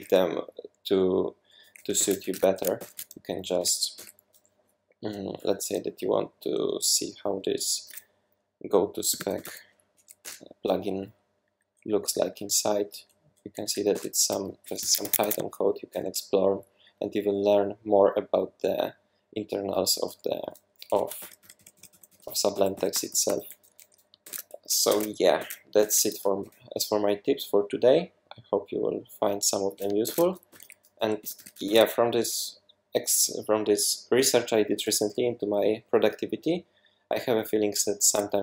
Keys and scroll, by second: 2.0 super+1, 2.2 super+2, 2.8 shift+super+p, 3.9 Return, 8.9-9.9 typing, 10.2 Return, 11.3 Down, 11.5 Down, 11.6 Down, 11.8 Down, 11.9 Down, 12.1 Down, 12.2 Down, 12.4 Down, 12.5 Down, 12.7 Down, 13.0 Down, 13.7 Up, 14.0 Return, 15.0 Escape, 15.2 Escape, 20.4-23.3 typing, 24.2 super+w, 24.9 super+1, 25.4 super+2, 25.8 super+1, 30.1 super+2, 30.5-31.4 typing, 31.7 super+s.